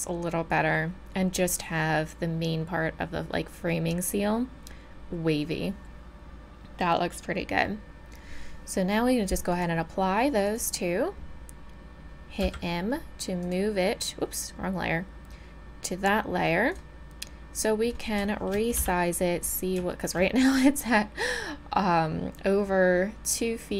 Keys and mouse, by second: 9.5-12.4 drag, 12.4 m, 17.5 middle click, 17.7 middle click, 18.0 click, 18.4 middle click, 18.8 n.